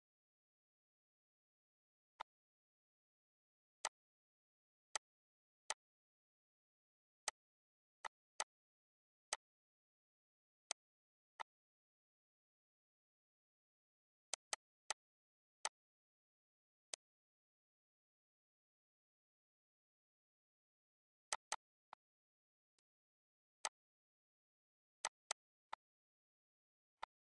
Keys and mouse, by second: 1.3 click, 3.0 click, 4.2 click, 5.2 click, 7.1 click, 7.9 click, 9.2 click, 10.5 click, 11.2 click, 12.8 ctrl+z, 14.2 click, 15.5 click, 16.8 click, 17.5 ctrl+z, 18.8 ctrl+z, 19.2 ctrl+z, 19.5 ctrl+z, 19.9 ctrl+z, 20.1 ctrl+z, 21.1 click, 22.4 shift+click, 23.3 click, 24.8 click, 26.0 ctrl+s, 26.4 click.